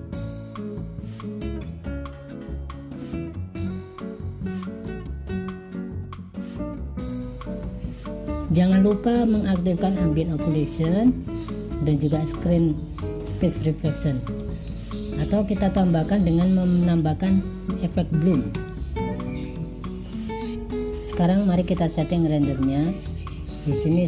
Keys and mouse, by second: 0.5-1.8 drag, 2.0 click, 2.7 click, 3.3 click, 3.6 click, 4.5 click, 5.8 click, 6.1 click, 6.4 click, 6.9 click, 7.6 click, 7.8 click, 8.3 click, 10.5 click, 14.3 click, 18.6 click, 23.5-24.0 drag.